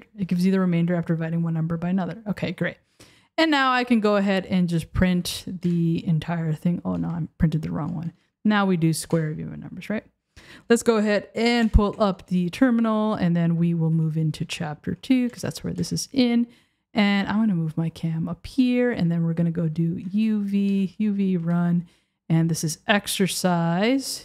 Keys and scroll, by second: 3.0 Return, 5.7 Return, 7.0 BackSpace, 9.1 Return, 11.9 super+j, 15.1 Down, 15.4 Return, 20.7 BackSpace.